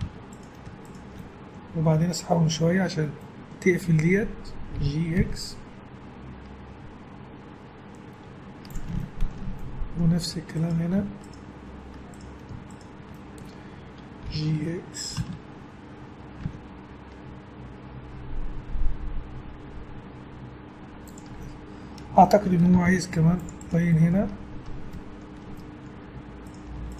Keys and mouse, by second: 0.0 a, 0.6-1.9 drag, 3.3-4.8 middle drag, 4.8 g, 9.0 middle click, 10.6-12.6 right drag, 13.1-14.4 middle drag, 14.3 g, 21.4-23.3 middle drag, 22.7 ctrl+r, 24.1-25.2 middle drag, 26.1 middle click, 26.4 click.